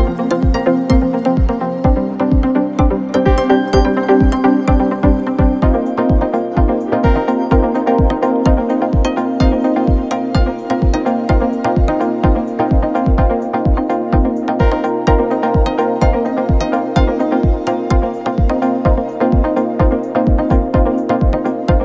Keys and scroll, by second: 3.6 ctrl+l.